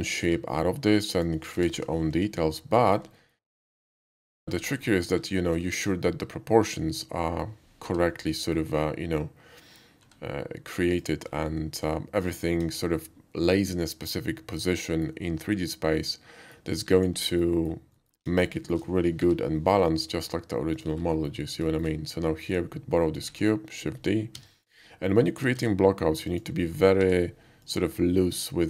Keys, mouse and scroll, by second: 0.2 x, 1.1 click, 1.6 g, 1.7 y, 2.1 x, 2.8 click, 3.2 alt+middle click, 3.4 middle drag, 3.5 alt+middle drag, 3.8-4.3 typing, 4.0 click, 4.8 alt+middle click, 5.5 shift+middle click, 5.6 shift+middle click, 6.0 shift+middle click, 6.4 shift+middle click, 6.7 shift+middle click, 7.8 g, 8.5 click, 10.0 s, 10.9 click, 11.2 middle click, 11.9-12.4 shift+middle drag, 12.7 KP_5, 12.9 middle click, 14.0-15.0 middle drag, 15.5-16.5 middle drag, 16.9 click, 17.3 alt+middle click, 17.6 alt+middle click, 18.0 alt+middle click, 18.3 KP_5, 18.6 middle click, 19.2 g, 20.7 click, 21.1 alt+middle drag, 21.6 shift+middle drag, 22.5 shift+click, 23.2 shift+d, 24.3 z, 24.6 click, 25.4 s, 25.6 z, 25.7 s, 26.3 click, 26.6 middle click, 27.0 g, 27.6 click, 27.8 s.